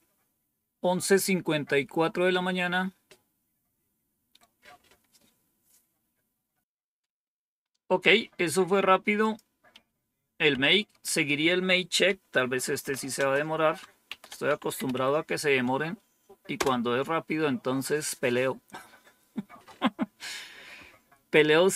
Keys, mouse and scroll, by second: 9.1 click, 9.7 Up, 10.4 Down, 12.0-15.3 typing, 16.5 Return.